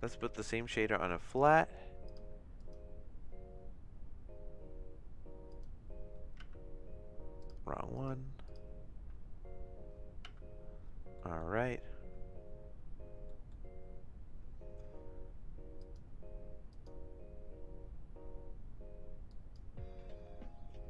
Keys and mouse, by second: 0.8 middle click, 1.2 click, 2.1 click, 2.7-5.7 drag, 6.4 space, 7.4 click, 7.9 click, 10.3 space, 11.2 middle click, 13.3 click, 15.8 click, 16.7 click, 19.2 click.